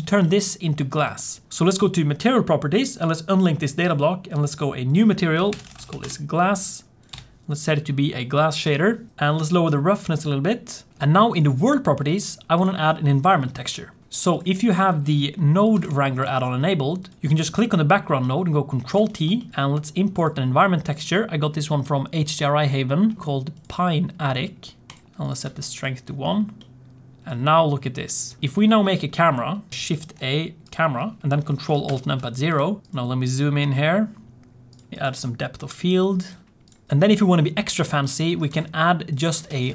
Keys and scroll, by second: 0.9 g, 5.8 s, 18.9 ctrl+t, 29.7 shift+a, 31.8 ctrl+alt+KP_0, 39.4 shift+a.